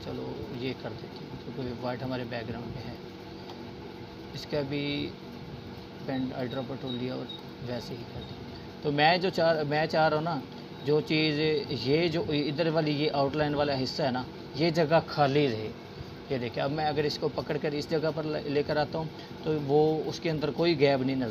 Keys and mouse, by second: 10.6-11.2 drag, 19.0 click.